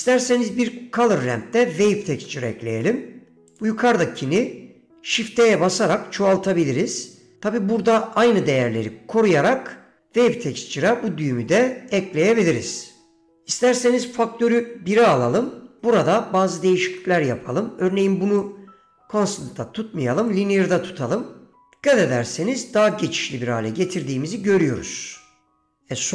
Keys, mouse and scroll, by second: 0.1 middle click, 1.7 middle click, 2.4 middle click, 2.9 middle click, 3.6 click, 4.3 middle click, 5.8 shift+d, 14.3-15.3 drag, 15.9 middle click, 17.1 middle click, 18.5-20.6 drag, 23.0-26.1 drag.